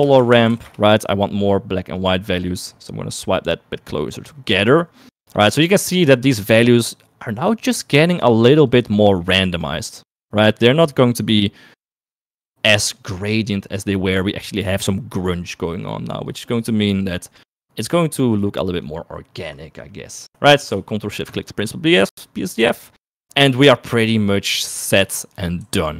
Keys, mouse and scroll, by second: 0.8 r, 2.7 middle click, 3.6-4.6 drag, 5.1 click, 6.1-8.1 drag, 8.4 middle click, 9.0-10.1 drag, 10.5-13.1 drag, 15.8 middle click, 16.6-19.0 drag, 20.0 middle click, 21.5 ctrl+shift+click, 25.6 shift+middle click.